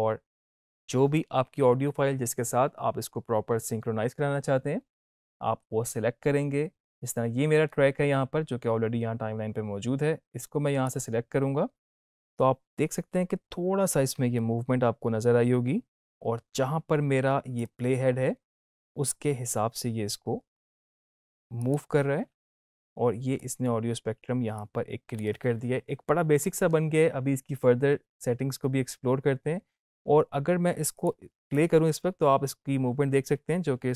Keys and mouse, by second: 10.8 click, 17.5-27.3 drag, 30.9 click.